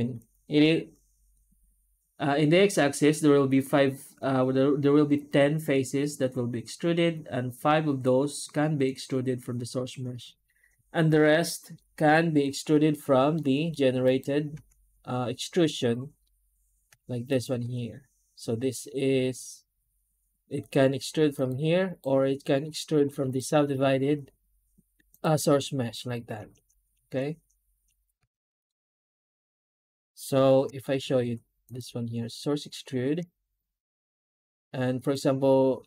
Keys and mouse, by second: 13.2-13.6 middle drag, 13.9 click, 14.4 Tab, 17.2-20.2 drag, 21.5 Tab, 21.7 click, 23.1-25.1 drag, 25.3 Tab, 28.5 x, 28.9-29.3 drag, 30.3 shift+h, 30.7 middle drag.